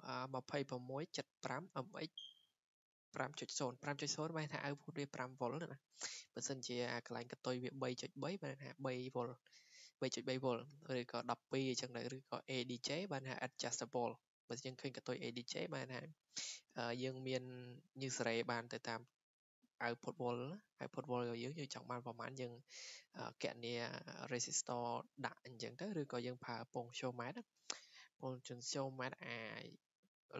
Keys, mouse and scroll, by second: 5.7 click, 7.0 click, 8.2 click, 11.1 click, 11.6 click, 11.9 click, 12.3 click, 15.4 click, 16.7 click, 22.9 click.